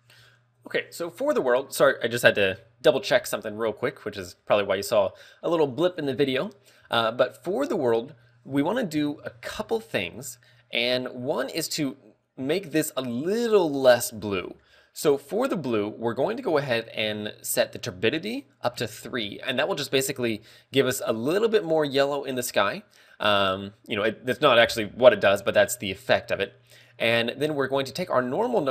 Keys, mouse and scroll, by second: 4.8 click, 18.1 ctrl+click, 19.1 ctrl+click.